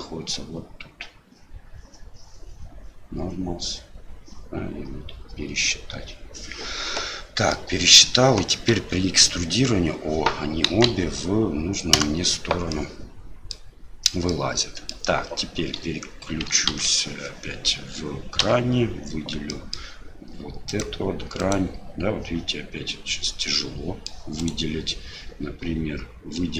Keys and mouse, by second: 7.5 middle click, 12.8 middle click, 14.4 middle click, 15.7 3, 16.7 alt+a, 18.4 l, 19.5 middle click, 20.7 click, 21.4 click, 23.4 middle click, 24.4 click.